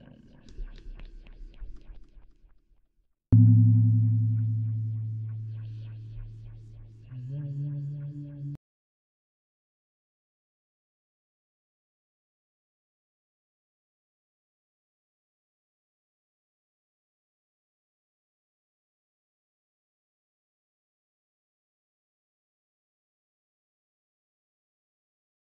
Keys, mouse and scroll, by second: 2.7 middle click, 3.9-6.1 middle drag, 7.2 middle click, 8.1-19.4 typing, 16.1 middle click, 17.0-20.0 drag, 21.3 d, 21.5 click, 21.8 d, 24.2 middle click, 25.5 click.